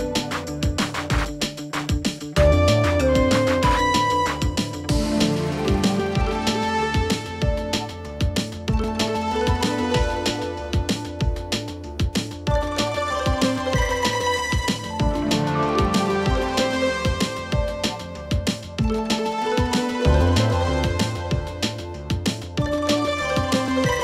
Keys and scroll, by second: 11.4 Escape.